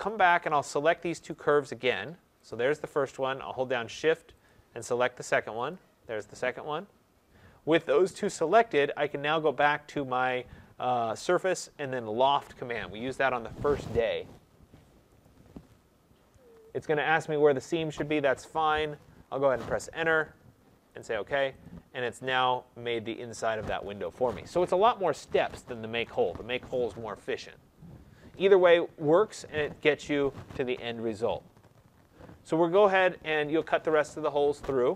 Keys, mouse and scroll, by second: 0.1 click, 1.2 click, 2.4 click, 4.4 shift+click, 5.6 click, 15.1 click, 19.3 Return, 20.9 click, 21.6 click, 22.1 middle click, 28.7 middle click, 32.0 middle click.